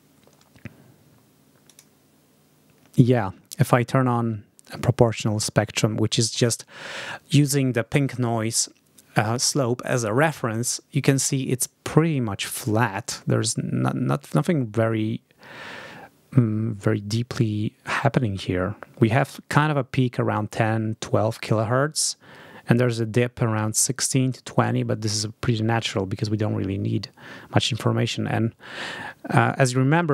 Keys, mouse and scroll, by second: 1.5 click.